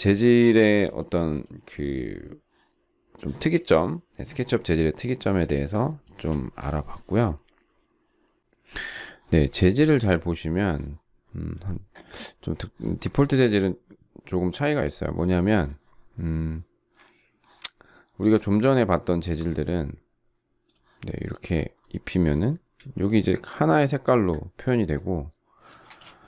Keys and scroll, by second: 5.3 Delete, 6.1 Delete, 25.8 space.